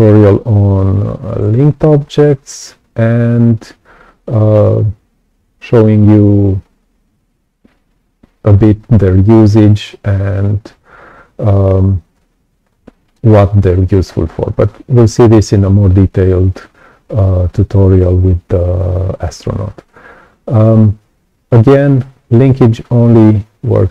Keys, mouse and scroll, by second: 12.1-13.1 right drag, 12.1 click.